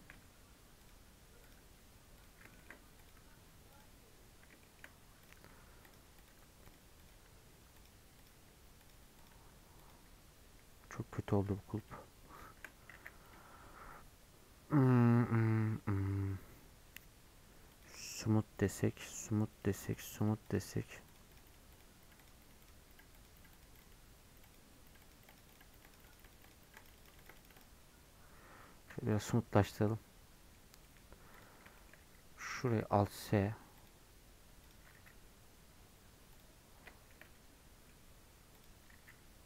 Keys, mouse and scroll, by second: 37.0-39.4 middle drag.